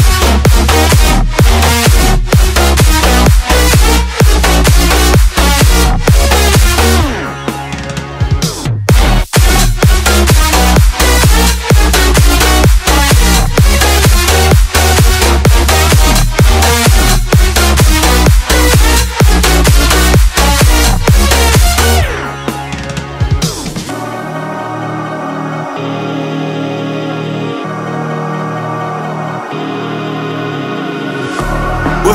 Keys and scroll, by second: 9.0 ctrl+z, 14.4 Return, 28.1 s, 28.7 BackSpace, 29.7-30.8 typing, 32.0-32.1 typing.